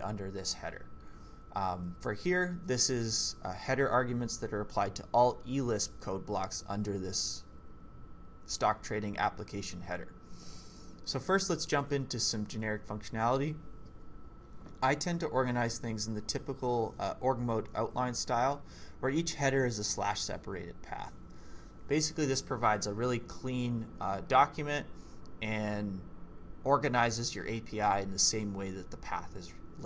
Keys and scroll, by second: 1.0-1.7 typing, 7.5 k, 11.4-12.6 typing, 14.0-14.4 typing.